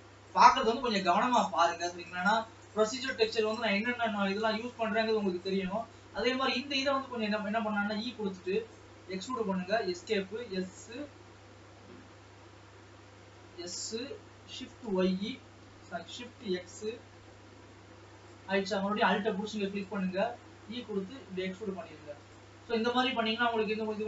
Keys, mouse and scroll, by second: 0.0 ctrl+s, 0.6-2.9 middle drag, 2.9-3.5 scroll up 4, 3.5 click, 3.8 Tab, 4.2 scroll down 1, 4.9 alt+a, 5.8 alt+click, 8.7 e, 10.5 s, 13.4 Escape, 13.7 s, 16.5 s, 18.8 alt+a, 19.7 alt+click, 20.5 e, 23.3 alt+a, 23.6 scroll up 2.